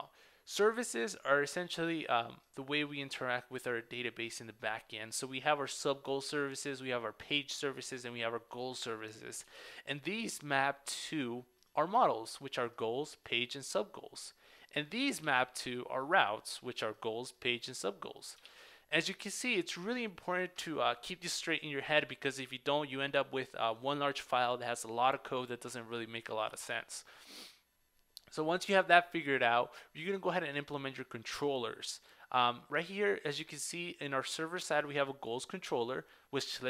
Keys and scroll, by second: 9.5 super+w, 10.5 super+w, 15.2 super+w, 18.6 super+w.